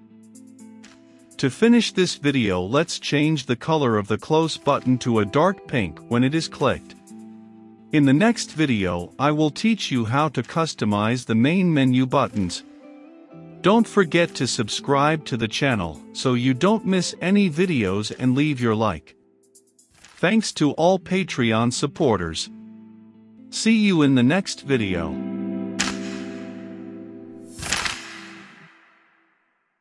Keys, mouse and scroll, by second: 2.4 right click, 2.9-18.9 drag.